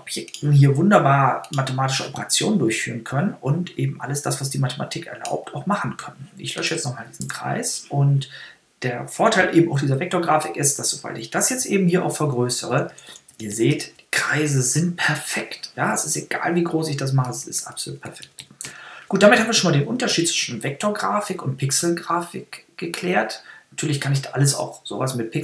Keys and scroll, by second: 7.0 BackSpace, 11.7 super++, 17.0 super+-.